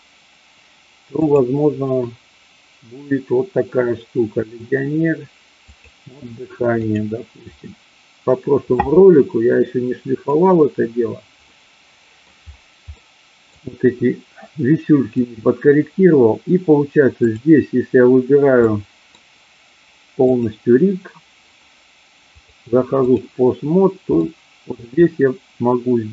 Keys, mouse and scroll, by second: 1.2-7.4 drag, 11.4 middle click, 12.9 middle click, 17.2 click, 18.7-19.0 middle drag, 20.2 click, 22.3-23.2 drag, 24.2 middle click.